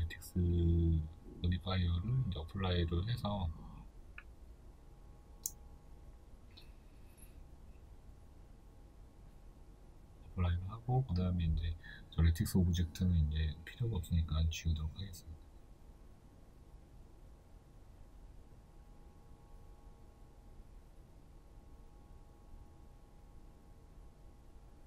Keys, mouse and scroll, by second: 2.9-9.3 shift+middle drag, 9.3 click, 9.9 right click, 10.9 x, 11.6-12.6 middle drag, 12.6 right drag, 13.1-13.5 scroll down 1, 13.5-24.2 middle drag, 15.0 scroll up 1, 16.3 KP_1, 17.6 scroll down 1, 19.7-20.0 scroll down 2, 20.0 scroll up 1, 20.6 scroll down 1, 21.5 scroll up 1, 24.2-24.8 drag.